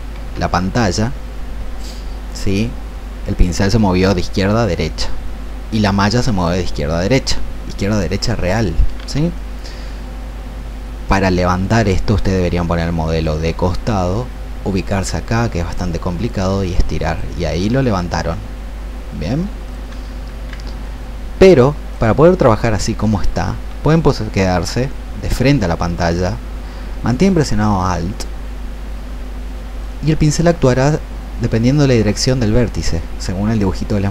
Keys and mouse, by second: 0.2 ctrl+z, 5.6 click, 8.9 ctrl+z, 11.9-13.1 drag, 16.1-20.0 drag, 20.3 ctrl+z, 20.7-22.1 drag, 29.7-34.1 alt+drag.